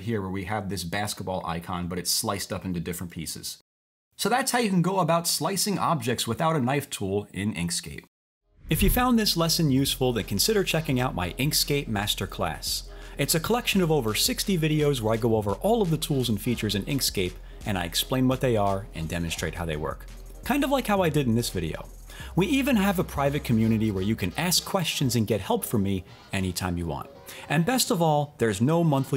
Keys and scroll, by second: 3.3 super+z, 3.7 super+z.